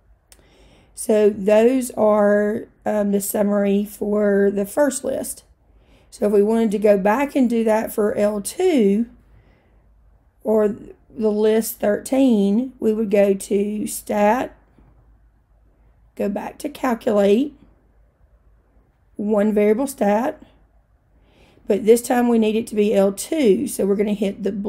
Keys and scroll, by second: 17.2 Right, 20.4 Return.